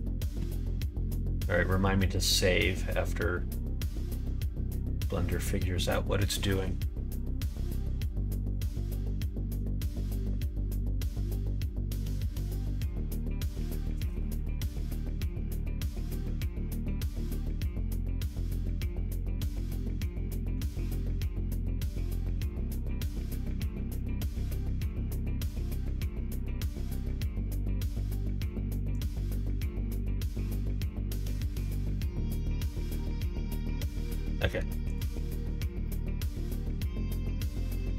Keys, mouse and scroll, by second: 34.4 middle click, 34.8 click, 35.2 middle click, 35.7-37.9 middle drag.